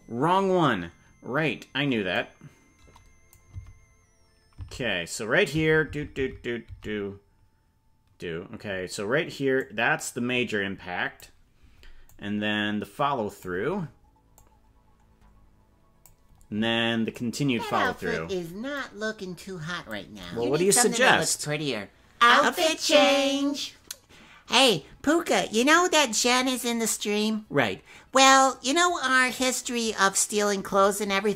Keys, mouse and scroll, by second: 2.1-3.4 drag, 3.7 Right, 4.6 Left, 5.9 Right, 6.2 Right, 6.7 Right, 9.5-11.2 drag, 12.1-13.4 drag, 14.3-16.1 drag, 17.1 click, 18.7-19.9 drag.